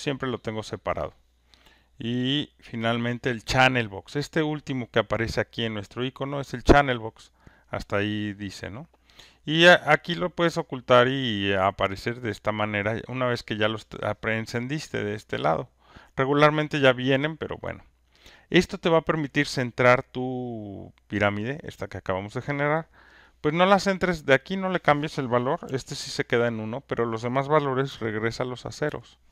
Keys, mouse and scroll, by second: 0.9 click, 2.5 click, 6.3-7.6 drag, 9.1 click, 10.9 click, 12.1 click, 13.5 click, 15.9 click, 18.3 click, 23.9 click, 24.5 click, 25.6 typing, 26.0 Return, 26.8 click, 27.9 typing, 28.7 click.